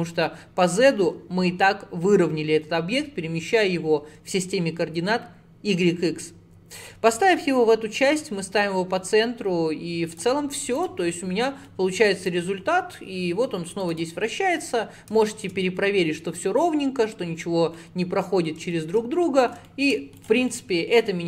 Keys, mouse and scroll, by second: 10.2 click, 10.8 click, 11.2-12.3 middle drag, 12.3 click, 14.3-15.9 middle drag, 15.9 scroll up 3, 17.4-17.8 scroll down 5, 17.8 middle click, 18.3-18.8 scroll down 1, 18.8 shift+middle click, 19.0 scroll down 1, 19.3 middle click, 20.2 click, 20.5-21.2 middle drag.